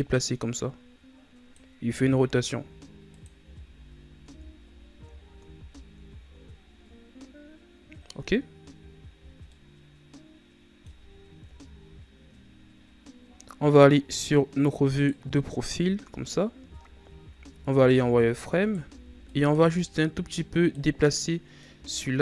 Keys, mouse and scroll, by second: 1.7 r, 3.3 z, 3.7 scroll down 5, 4.2 Tab, 4.6-5.1 scroll down 2, 5.1-5.5 scroll up 4, 5.5 a, 6.5-9.7 scroll down 2, 13.6-14.8 middle drag, 14.8 right click, 15.6 KP_3, 16.7-17.3 scroll up 2, 17.3 Tab, 17.8 z, 18.5 right click, 18.8 b, 20.9 middle click, 21.7 z.